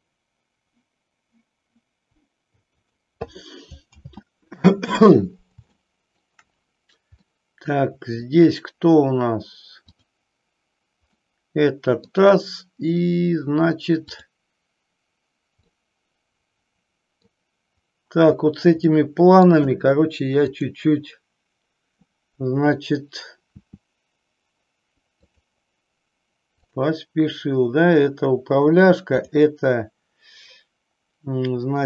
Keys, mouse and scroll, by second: 3.0 click, 4.1 ctrl+z, 5.7 shift+middle click, 7.4-8.5 middle drag, 9.9 click, 11.2-12.2 middle drag, 15.9-17.4 middle drag, 18.9 middle click, 20.5 click, 23.4 r, 25.5 click, 29.1 click.